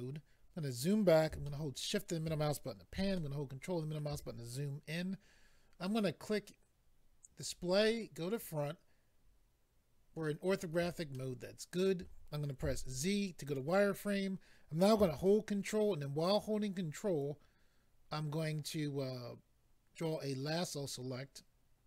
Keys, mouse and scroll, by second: 0.4-1.4 scroll down 3, 1.4 shift+middle click, 3.1 ctrl+middle click, 7.4 click, 7.5 click, 8.3 click, 8.4 click, 11.1 shift+middle click, 12.6 z, 13.5 click, 17.2 ctrl+right click.